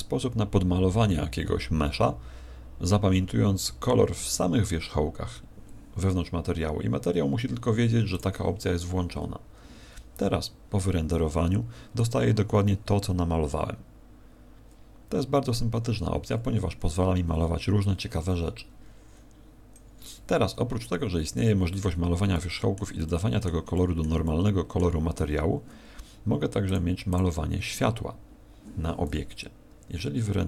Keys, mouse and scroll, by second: 15.0 Escape, 22.3 middle click, 23.0 middle click, 23.7 middle click, 24.2 middle click, 26.6 click, 27.1 click.